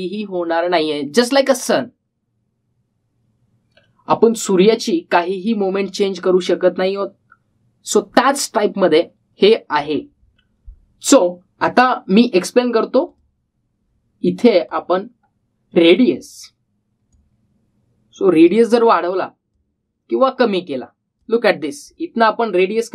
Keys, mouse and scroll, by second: 13.8-22.9 drag, 15.8-17.1 drag.